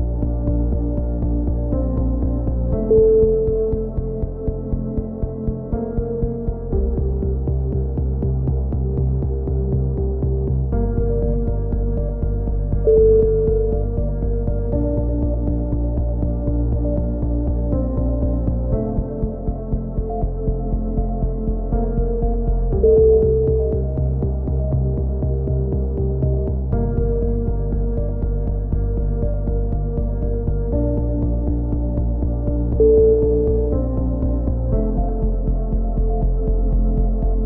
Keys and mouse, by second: 0.1 click, 0.9 middle click, 1.3 z, 1.8 click, 2.4 click, 2.4 z, 4.4 click, 6.3 click, 7.5 c, 8.6-10.1 drag, 12.0 ctrl+l, 13.1 click, 16.7 e, 17.1 click, 18.3 click, 21.6 c, 22.6 click, 23.6 click, 24.6-26.4 middle drag, 26.4 a, 27.4 ctrl+r, 31.3 a, 32.1 c, 33.8-35.2 drag, 34.3 e, 34.4 right click, 35.2-36.9 middle drag.